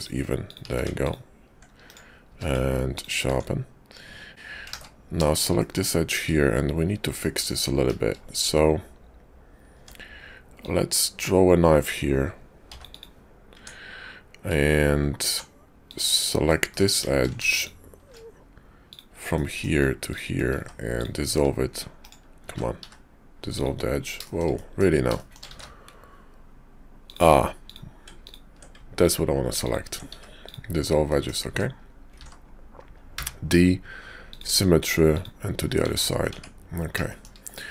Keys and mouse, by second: 0.5 click, 0.7 q, 2.3 q, 3.3 Tab, 4.3 x, 4.7 ctrl+z, 5.2 shift+click, 5.6 click, 7.2 click, 8.4 `, 9.7 Tab, 10.5-13.0 drag, 13.6 Tab, 15.9 click, 16.5 middle click, 18.8 click, 19.3 middle click, 20.4 x, 21.3 `, 22.2 ctrl+click, 22.4 ctrl+z, 22.7 x, 24.5 middle click, 25.5 ctrl+z, 26.9 click, 28.9 ctrl+click, 30.0 x, 31.0 middle click, 31.4 Tab, 32.1 alt+x, 35.1 click, 35.9 `, 36.3 Tab, 37.1 shift+click.